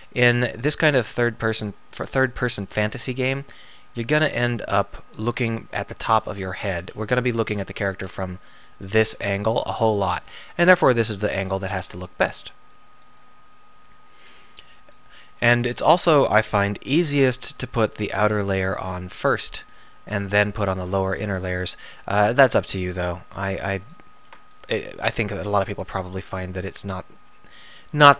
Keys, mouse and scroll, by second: 0.5 r, 1.7 r, 2.7 g, 4.8 click, 13.1 g, 16.9 r, 26.0 g, 26.7-27.9 drag, 27.9 g.